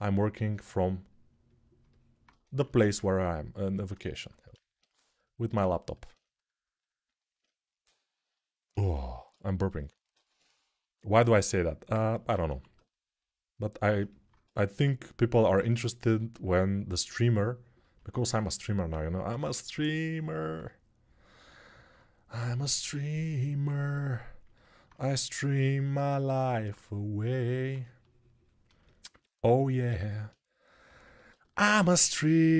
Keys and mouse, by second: 2.0-32.5 ctrl+drag, 2.2 ctrl+z, 2.4 ctrl+z, 12.2 1, 19.0 g, 30.5 g, 31.5 g.